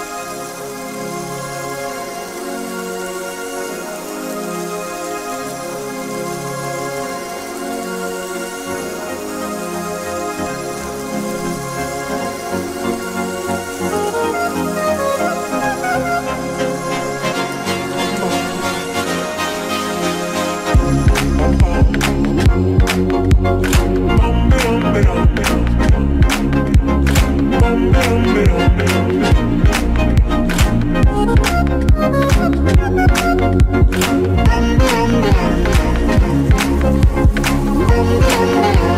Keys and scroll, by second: 6.2 ctrl+t, 12.7 Return.